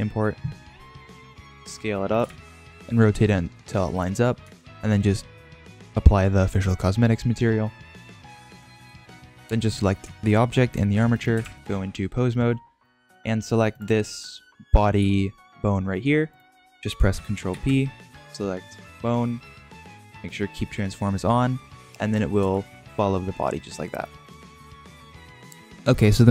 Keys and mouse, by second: 0.7-1.4 middle drag, 1.5 s, 2.1 r, 2.7 g, 3.0-4.0 middle drag, 4.4-4.7 shift+middle drag, 7.9-9.2 middle drag, 9.6 click, 11.1 shift+middle drag, 11.4 ctrl+Tab, 12.8 drag, 13.7 click, 15.0 g, 17.4 ctrl+p, 21.8 click, 22.4 g, 24.8 ctrl+Tab.